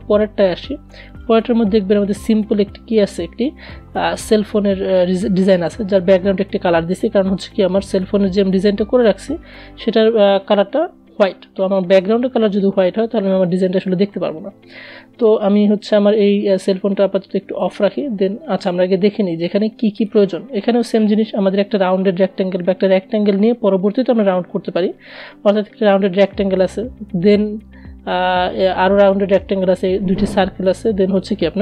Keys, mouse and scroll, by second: 16.0 click, 18.3 click.